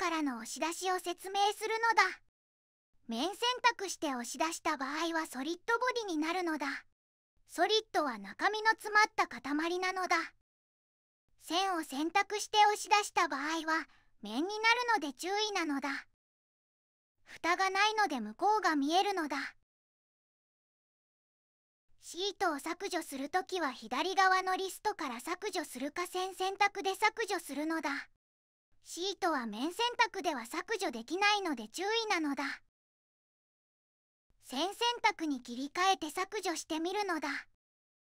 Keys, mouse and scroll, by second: 6.6 ctrl+z, 7.3 ctrl+z, 8.7 ctrl+z, 10.5 2, 13.4 e, 31.5-32.1 typing, 33.5 Delete, 33.5 BackSpace.